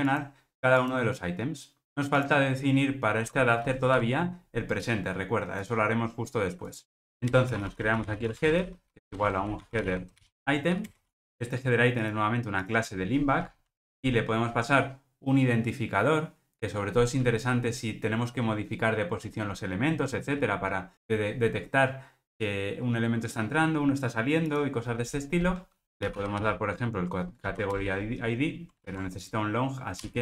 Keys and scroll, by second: 3.9 super+p, 11.1 Return, 13.8 super+p, 27.8 Return, 30.0 Escape.